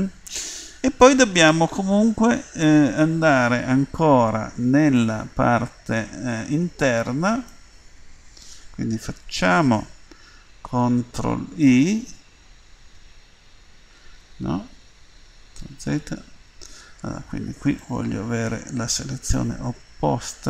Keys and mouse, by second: 5.0 middle click, 11.5 ctrl+i, 15.8 ctrl+z, 17.8 middle click.